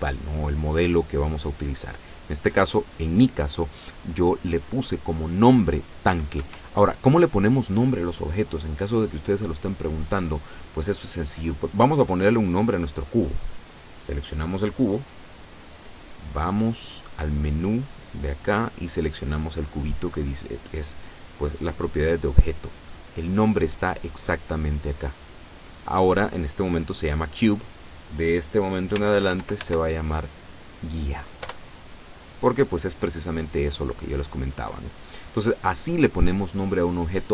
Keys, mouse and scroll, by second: 6.4 Escape, 8.4 right click, 11.2 middle click, 14.3 right click, 14.8 right click, 16.4-17.6 middle drag, 20.9 click, 23.9 click, 28.8-30.1 typing, 31.5 Return.